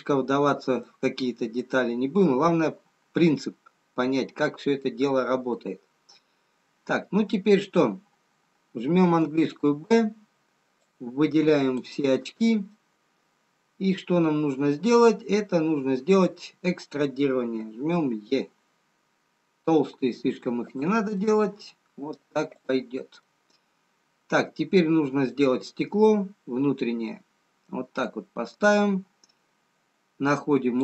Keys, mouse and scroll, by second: 0.8 middle click, 0.8-2.3 scroll down 2, 2.3 middle click, 2.3 scroll up 2, 6.4-8.4 scroll down 1, 10.9 b, 13.1 middle click, 16.3 middle click, 17.7 e, 21.3 middle click, 23.0 click, 24.3 middle click, 29.1 scroll up 2, 30.7 click.